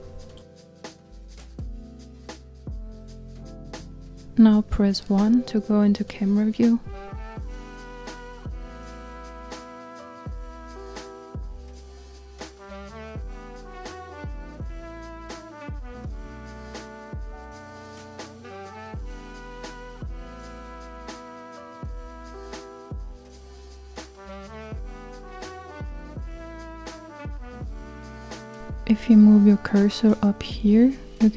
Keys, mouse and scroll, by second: 1.0 Tab, 2.0-2.4 scroll down 2, 2.4 middle click, 3.2 click, 4.4-7.7 middle drag, 7.7 KP_0, 9.3-13.6 scroll down 5, 15.4-24.1 middle drag, 24.1 click.